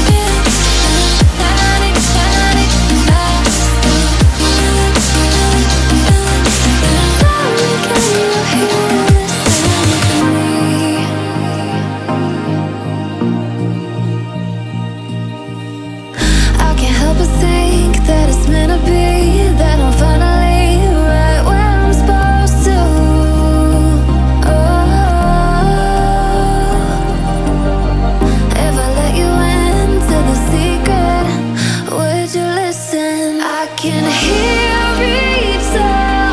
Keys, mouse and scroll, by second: 4.5-5.0 alt+scroll down 2, 5.0-6.1 alt+scroll up 2, 6.1-8.1 drag, 9.4-11.4 drag, 11.4-12.0 alt+scroll down 1, 12.3 alt+scroll up 1, 14.4 Right, 15.3 Left, 16.2 click, 16.5 alt+scroll up 1, 16.9-20.4 drag, 20.4 Left, 22.8 alt+scroll down 1, 23.1 click, 23.4-23.8 alt+scroll down 2, 23.8-24.7 alt+scroll up 2, 24.7 click, 25.4 F7, 26.2-27.1 alt+scroll up 2, 27.1-29.7 drag, 28.3-29.7 drag, 31.8 click, 35.1 click.